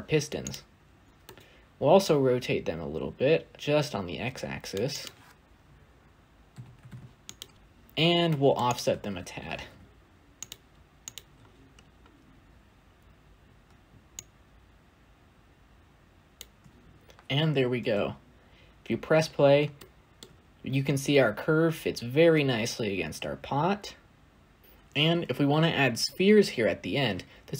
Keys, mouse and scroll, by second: 1.4-7.5 drag, 7.5-8.1 scroll up 6, 10.3 shift+a, 14.5-16.7 shift+drag, 16.7-17.7 scroll up 2, 17.7 space, 18.9-19.7 scroll up 5, 19.7-20.1 shift+middle drag, 20.1-21.7 scroll up 4, 21.7-23.5 scroll up 1, 23.5 scroll up 1, 24.6 scroll down 5, 24.7-25.9 scroll up 9, 25.9 scroll down 1.